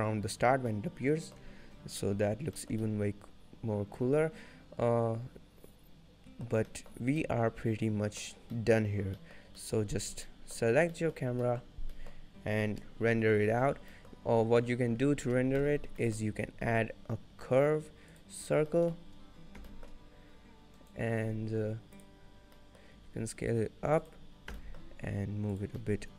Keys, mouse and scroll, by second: 0.8 middle click, 1.9 scroll down 1, 2.1 middle click, 2.6 shift+middle click, 2.9 middle click, 3.3 shift+middle click, 6.6 scroll up 2, 6.8 middle click, 7.1 scroll down 1, 7.3 middle click, 8.6 middle click, 8.9-9.2 scroll down 2, 9.2 middle click, 9.7 middle click, 10.1 scroll down 1, 10.3 middle click, 11.0 middle click, 11.0 scroll down 2, 11.3-11.8 scroll up 1, 11.8 middle click, 11.8 scroll down 1, 12.0 middle click, 13.8 scroll down 2, 14.0 middle click, 14.2 scroll up 3, 15.6 n, 15.9 scroll down 1, 16.1 middle click, 16.4 shift+a, 18.5 scroll down 3, 18.8 middle click, 19.7 g, 22.2 click, 22.5 scroll down 1, 22.6 middle click, 23.0 s, 24.6 g, 25.9 middle click.